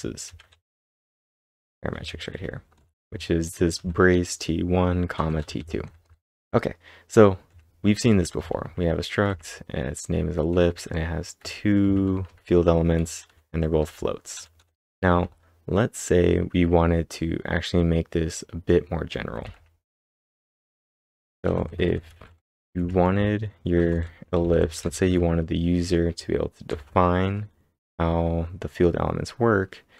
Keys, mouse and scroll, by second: 4.9-5.7 typing, 15.1 k, 19.3 typing, 21.0 Return, 21.2-25.5 typing, 26.7 shift+[.